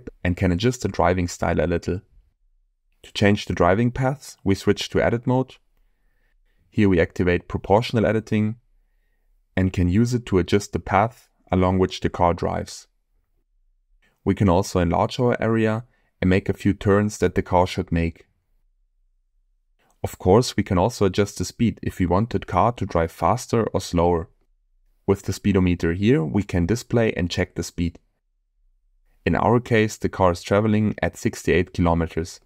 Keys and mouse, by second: 1.7 space, 2.6-3.8 drag, 4.3 click, 5.4 Tab, 6.0 click, 8.9 g, 9.4 y, 11.7 click, 12.5 g, 13.2 y, 19.9 Tab, 21.6 click, 25.5 click, 27.7 click, 28.1 space, 30.1 space.